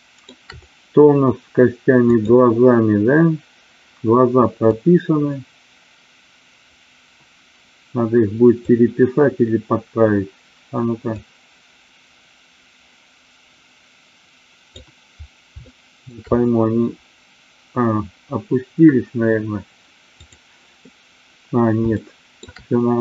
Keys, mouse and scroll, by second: 1.9 click, 4.6-8.8 drag, 11.2-14.8 drag, 15.6 shift+middle click, 21.9-22.4 shift+middle drag.